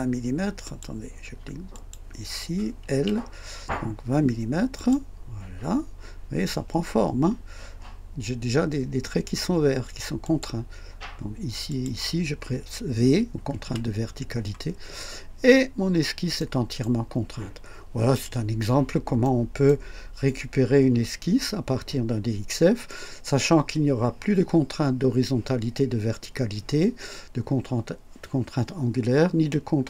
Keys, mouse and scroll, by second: 0.6 click, 1.7 click, 2.9 typing, 4.7 click, 10.2 click, 11.7 click, 13.6 typing, 14.7-15.1 scroll down 1, 15.7 scroll up 1, 16.4-17.0 right drag, 19.2-19.8 right drag.